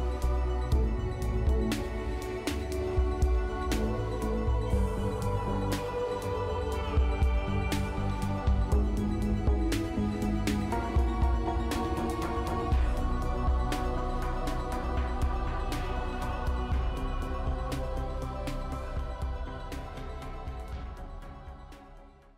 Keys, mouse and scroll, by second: 1.1 scroll up 1, 1.6 middle click, 2.0-2.3 scroll up 1, 3.9-20.4 scroll down 1, 21.5 right click.